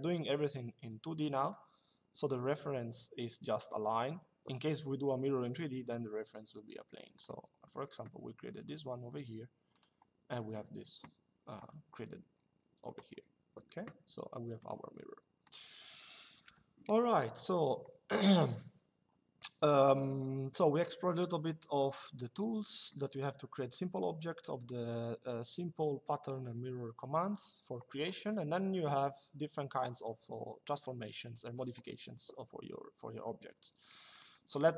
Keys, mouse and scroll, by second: 6.9 click, 9.5 click, 14.3 click, 16.2 Delete, 33.8 click.